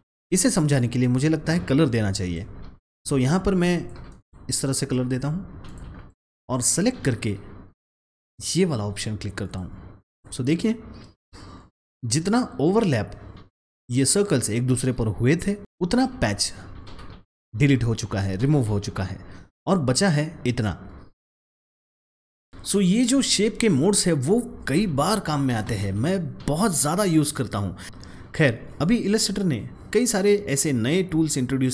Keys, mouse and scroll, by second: 0.1 ctrl+z, 1.8 click, 3.7-9.3 drag, 22.1 ctrl+z, 22.5 click.